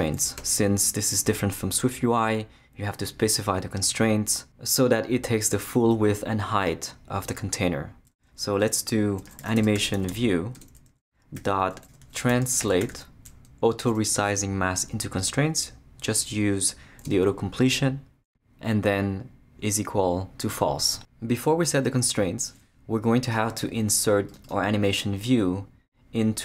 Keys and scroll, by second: 0.2 Return, 9.0-13.4 typing, 17.1 Return, 19.5-21.2 typing, 21.9 Return.